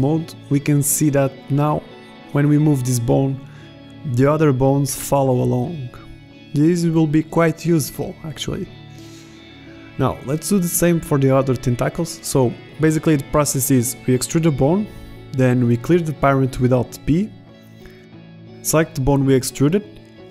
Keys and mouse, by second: 0.7 click, 1.1-1.7 middle drag, 1.7 g, 4.3-4.9 drag, 6.2-7.1 middle drag, 11.0 ctrl+Tab, 12.3 Tab, 12.8 Tab, 13.3 Tab, 13.7 alt+p, 14.5 e, 16.0 click, 16.3 alt+p.